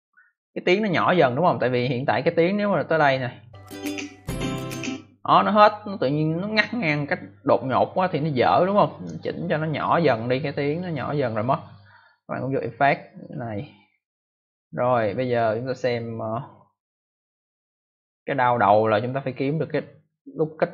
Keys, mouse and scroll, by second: 1.8 click, 3.3 click, 8.6 click, 10.6 click, 13.1 click, 15.0 click.